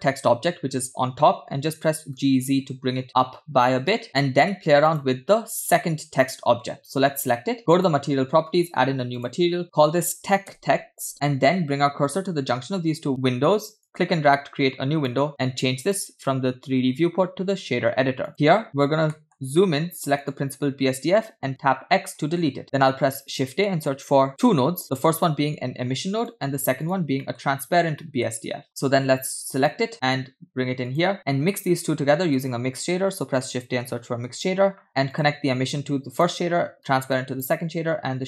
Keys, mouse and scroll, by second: 1.8 g, 4.0-4.4 middle drag, 4.9 click, 7.7 click, 9.5 click, 13.9-15.1 drag, 15.8-18.3 drag, 18.6 middle click, 18.7 scroll up 4, 19.1 middle click, 19.4-20.0 scroll up 2, 20.2 click, 22.2 x, 22.9 shift+a, 27.4 middle click, 27.7-28.3 scroll up 2, 28.3 middle click, 28.3 scroll up 2, 28.6 shift+a, 31.8 shift+a, 36.3 alt+click, 36.3 alt+right click, 37.4-37.9 alt+drag, 37.4 alt+right click.